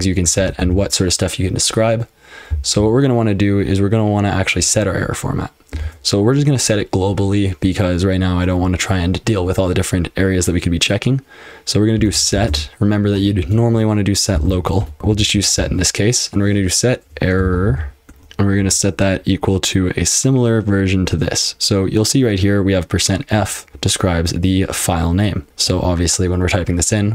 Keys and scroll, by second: 0.0-0.6 typing, 0.4 ctrl+w, 2.5-2.8 l, 5.8 shift+;, 11.7-15.5 typing, 16.8-18.6 typing.